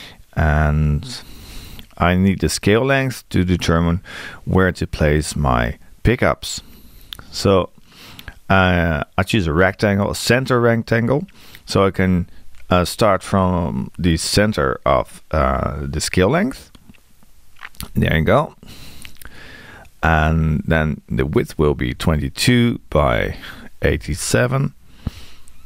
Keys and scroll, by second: 21.2 Tab.